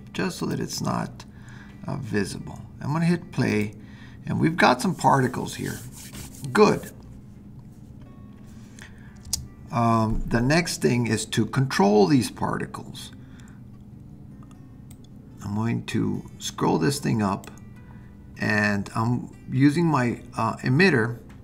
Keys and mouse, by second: 0.4 click, 3.5 click, 9.3 space, 15.0-17.5 drag.